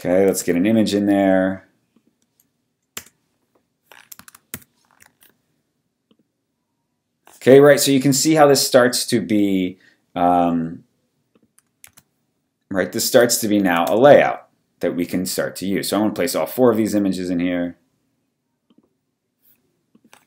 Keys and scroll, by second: 0.3 super+d, 3.0 Return, 4.5 alt+shift+super+c, 11.8 super+d, 14.0 Return.